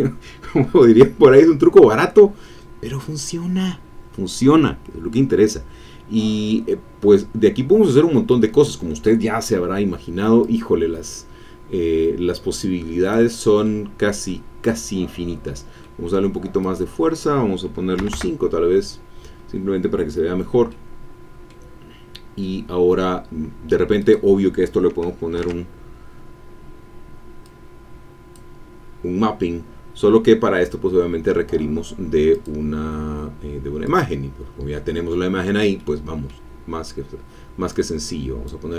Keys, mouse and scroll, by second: 6.9-7.4 scroll up 2, 7.6 middle click, 10.4-13.3 drag, 13.6-14.7 middle drag, 14.7 scroll up 1, 15.8 middle click, 16.6 click, 17.9 KP_5, 18.1 KP_Enter, 20.6 middle click, 21.9-22.2 scroll down 2, 22.4 middle click, 24.0 click, 25.3 ctrl+t, 27.4-28.5 drag, 32.3 click, 33.8 click, 35.8 middle click, 37.7 click.